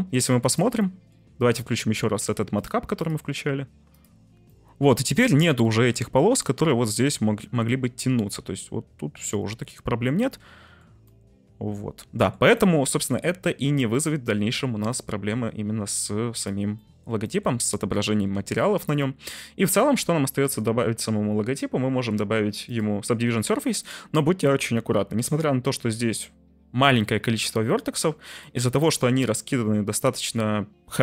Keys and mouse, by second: 0.6 shift+middle click, 0.8 middle drag, 2.6-4.1 middle drag, 4.5 middle click, 5.3-7.5 middle drag, 8.1-10.7 middle drag, 11.1-12.3 middle drag, 12.5 shift+middle drag, 13.9-16.5 drag, 16.8 middle drag, 17.3 shift+middle click, 17.7 middle drag, 18.3 ctrl+s, 19.0-19.9 middle drag, 22.7-25.4 drag, 28.5-31.0 drag.